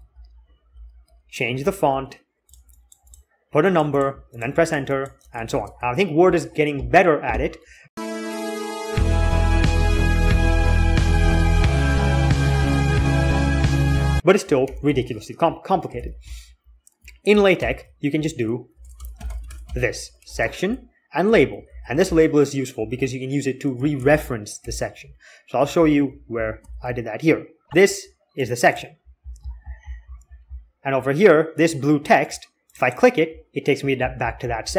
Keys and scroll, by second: 0.2 ctrl+z, 0.5 ctrl+z, 0.8 ctrl+z, 1.4 ctrl+z, 1.7 ctrl+z, 5.3 alt+x, 14.2-15.4 typing, 15.8 alt+k, 17.4 alt+k, 17.7-20.4 typing, 22.2 l, 23.9-27.3 typing.